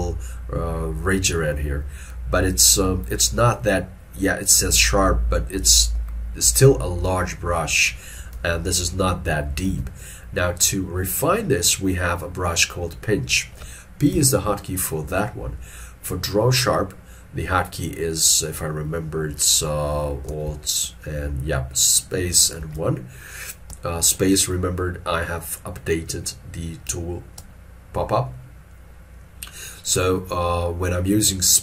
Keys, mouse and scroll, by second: 3.6-6.6 scroll up 1, 8.4 alt+e, 9.8 alt+e, 14.2 p, 20.4 space, 22.5 space, 23.8 space, 27.5 space.